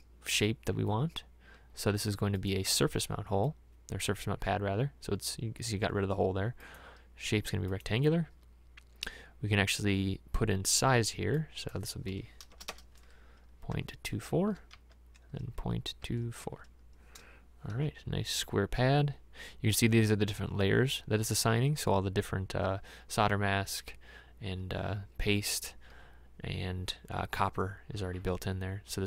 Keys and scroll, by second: 12.6 BackSpace, 12.8 BackSpace, 13.8 KP_2, 14.7 Tab, 15.6 KP_Decimal, 16.0 KP_2, 16.4 KP_4, 17.8 Tab.